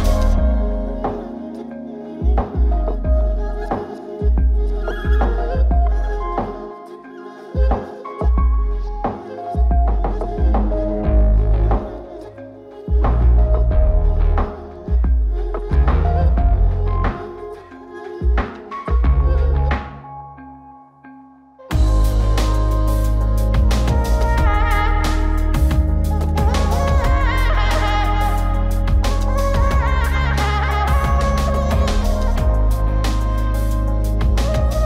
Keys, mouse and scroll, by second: 1.6-2.8 drag, 4.0-5.3 drag, 6.3-9.7 drag, 11.6 ctrl+space, 12.2-14.3 scroll up 5, 14.3 click, 15.2 click, 17.0 click, 18.7 click, 19.1 click, 25.8 click, 27.4 click, 29.6 click, 33.0 click, 34.2 click.